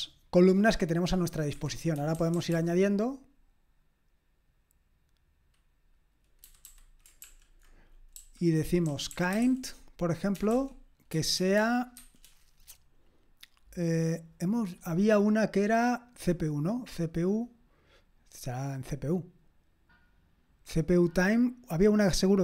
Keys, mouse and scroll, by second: 1.0-1.5 scroll up 1, 1.5 click, 1.5 Escape, 2.0-2.5 typing, 6.4-11.4 typing.